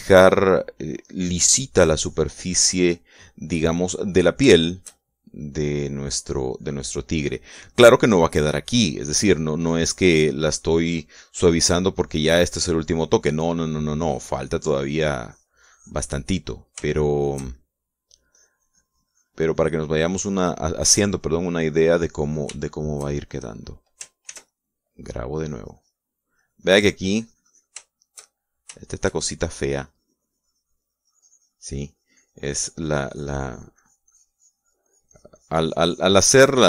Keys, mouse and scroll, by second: 0.1 shift+middle click, 0.6 shift+click, 1.0-3.2 shift+drag, 3.3 click, 3.9 click, 5.0 shift+middle click, 5.2-6.3 shift+middle drag, 6.3-8.9 shift+drag, 9.0 click, 9.6-11.6 drag, 11.8 click, 12.1 click, 13.2 click, 14.1 middle click, 14.6-16.9 drag, 17.0 middle click, 17.7-18.8 shift+middle drag, 19.0-23.2 drag, 23.3 shift+middle click, 24.9 ctrl+s, 25.1 ctrl+click, 26.1 click, 26.9-28.5 drag, 29.5 shift+click, 30.4-36.6 drag.